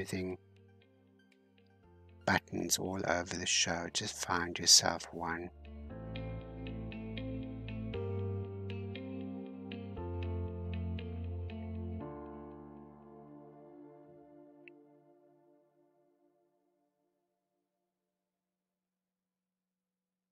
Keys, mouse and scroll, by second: 2.3-5.2 middle drag, 5.2 scroll up 3, 5.9-10.5 drag, 10.5-11.1 scroll down 1, 11.1-12.8 drag, 12.8-13.8 shift+middle drag, 13.8-17.4 drag, 17.4-18.6 shift+middle drag, 18.6-20.3 drag.